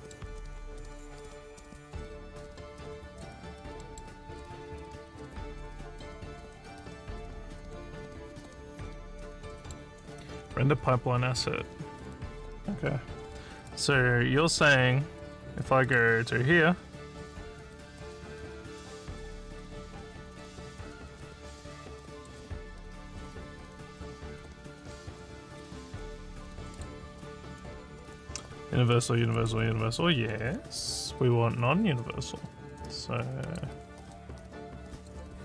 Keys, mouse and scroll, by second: 0.7-1.9 scroll up 1, 3.0 click, 3.8 middle click, 9.5 middle click, 13.7 click, 15.9 click, 16.8 scroll up 1, 17.5 scroll up 1, 21.2 scroll up 1, 22.2 click, 26.6 click, 26.8 click, 28.3 click, 28.9 click, 29.3 click, 30.9 click, 33.5 click, 34.3 scroll down 2, 35.0 click.